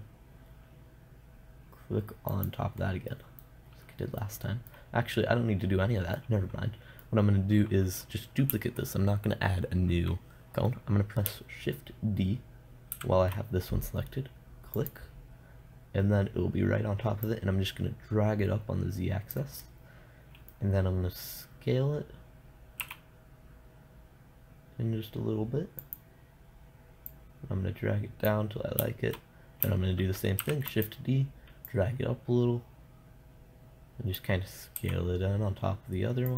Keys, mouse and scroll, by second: 2.8-4.7 drag, 4.7-6.6 middle drag, 13.4 shift+d, 15.3-19.8 drag, 20.1-23.3 middle drag, 23.3 s, 26.4-29.4 drag, 30.8 shift+d, 31.3-34.0 drag, 35.2 s.